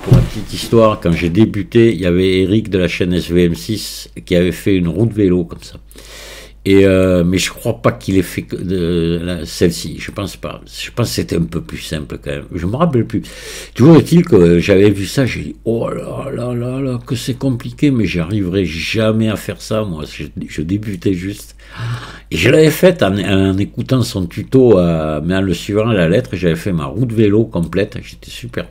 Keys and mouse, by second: 1.9-3.9 middle drag, 4.6-7.1 middle drag, 10.1-11.1 middle drag, 11.9-13.4 middle drag, 15.3-17.2 middle drag, 18.3-21.0 middle drag, 22.0-23.3 middle drag, 24.6-27.7 middle drag, 28.5-28.7 middle drag.